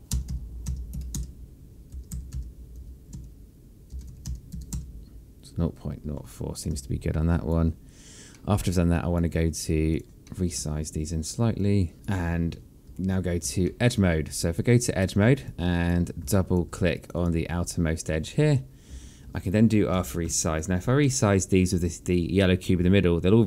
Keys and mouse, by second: 0.8-3.5 typing, 1.8 KP_Enter, 3.8 KP_Enter, 4.6 KP_0, 4.8 KP_Decimal, 5.0 KP_0, 5.2 KP_4, 5.4 KP_Enter, 7.2 click, 7.5 alt+click, 9.0 alt+middle click, 9.6 alt+click, 10.0 r, 10.4 alt+click, 10.9 alt+middle click, 13.0 alt+click, 14.3 alt+middle click, 15.3 right click, 16.1 alt+click, 17.0 alt+click, 20.6 r, 21.3 alt+click, 21.7 alt+middle click, 22.2 alt+click.